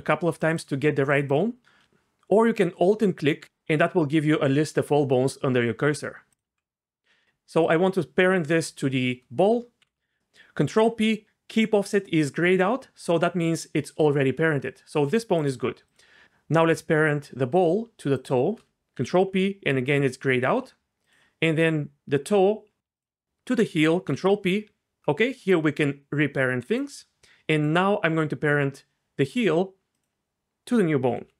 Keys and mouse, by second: 0.4 click, 1.1 click, 1.3 click, 9.8 ctrl+p, 19.0 ctrl+p, 24.1 ctrl+p, 27.6 click, 31.1 ctrl+p.